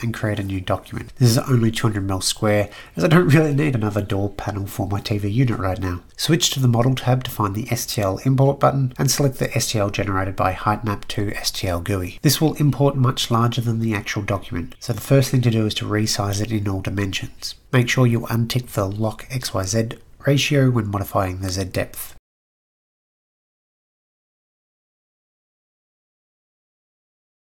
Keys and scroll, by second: 13.6-14.7 typing, 20.0-20.4 typing, 25.5 typing.